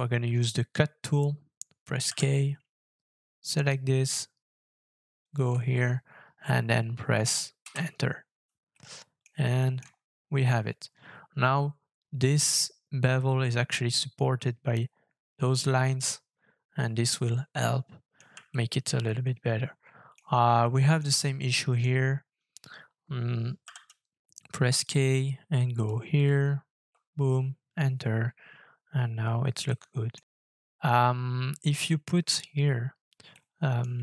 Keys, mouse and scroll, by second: 0.5-0.8 scroll down 1, 2.0 k, 7.6 Return, 8.7 middle click, 9.6 shift+middle click, 9.8-10.2 shift+scroll up 4, 15.9-17.6 scroll down 6, 17.6 middle click, 18.5 shift+middle click, 20.6 middle click, 21.2 shift+middle click, 22.2-23.6 scroll down 2, 23.6 k, 26.8 Return, 29.7 middle click, 33.3 middle click.